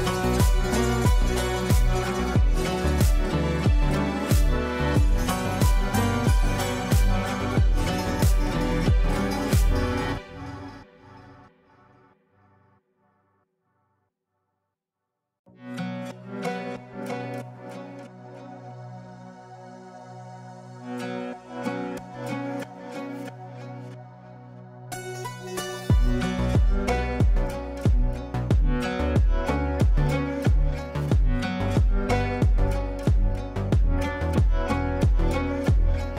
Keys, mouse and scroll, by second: 1.9 shift+click, 3.2 space, 3.9-14.5 drag, 14.5 space, 17.1 click, 17.1 click, 19.9 right click, 21.7 click, 23.2 ctrl+right click, 24.6 shift+click, 25.5 c, 26.6 ctrl+g, 27.5 shift+click, 28.3 e, 29.6-33.5 drag, 33.5 ctrl+right click, 34.7 shift+click, 35.5 e.